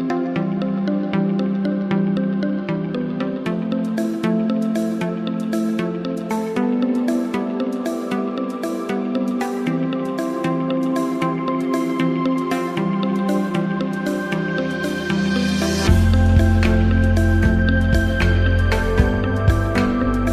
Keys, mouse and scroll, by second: 5.1 click, 8.8 click, 8.9 shift+click, 10.5 shift+click.